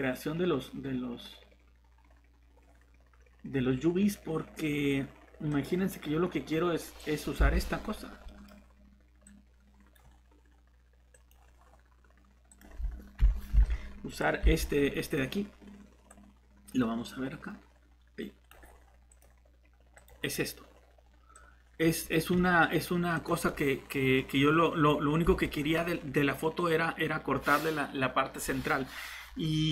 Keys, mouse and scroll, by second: 7.5 alt+Tab, 13.2 Delete, 13.6 alt+Tab, 25.2 Tab.